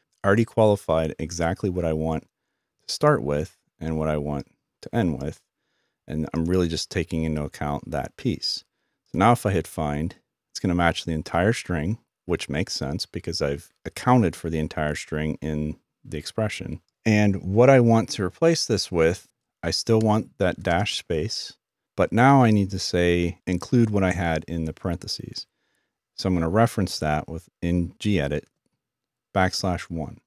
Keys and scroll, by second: 19.4-20.1 typing.